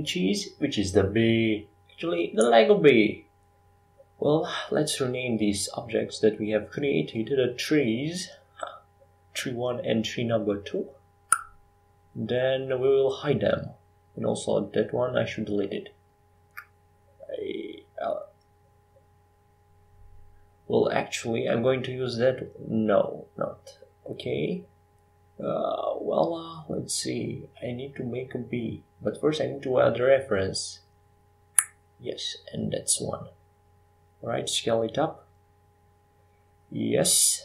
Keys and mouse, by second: 7.2 r, 10.5 s, 12.9-15.0 drag, 15.0 f, 15.6 e, 17.3 e, 18.0 Escape, 20.0 e, 20.5 Tab, 22.6 Tab, 23.9 Tab, 24.9 f, 25.3 e, 32.0 Tab, 33.8 g, 36.6 Tab.